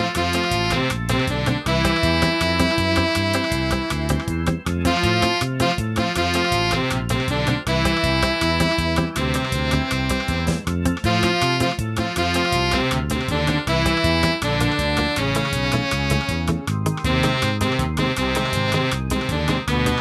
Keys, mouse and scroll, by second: 1.0 click, 1.5-1.9 scroll down 5, 2.4 shift+middle click, 2.9-3.2 scroll up 2, 3.7 click, 9.8-10.3 scroll up 1, 10.3-10.8 scroll up 1, 16.0 scroll up 2, 16.4 click, 18.7 shift+middle click.